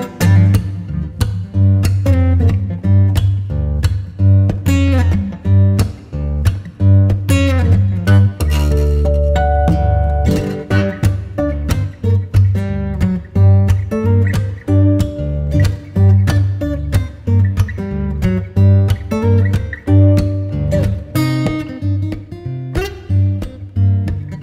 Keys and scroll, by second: 1.0 F4, 1.4 Escape, 2.5 F3, 2.9 F2, 5.6 space, 7.5 F10, 10.6 space.